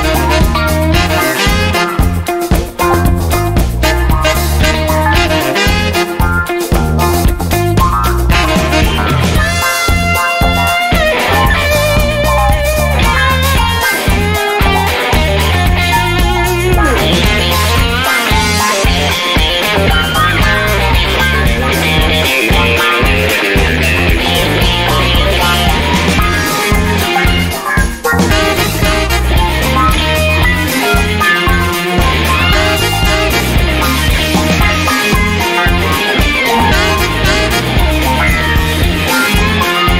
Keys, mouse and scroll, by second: 1.1-2.7 drag, 3.3-3.7 scroll up 1, 4.9 click, 6.2 click, 7.8 click, 9.2 click, 11.8 click, 13.7 click, 15.4 BackSpace, 16.1 BackSpace, 16.7 9, 18.0 Left, 20.3 -, 22.4 click, 25.4-26.4 typing, 27.9 click, 30.8 click, 31.8 click, 35.0 0, 38.2 click, 39.3 1, 39.9 click.